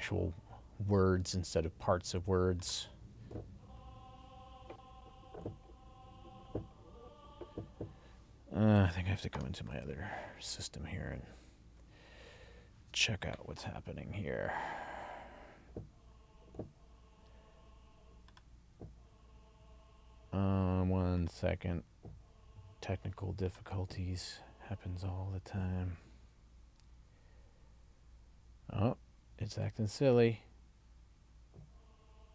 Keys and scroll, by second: 8.8 super+s.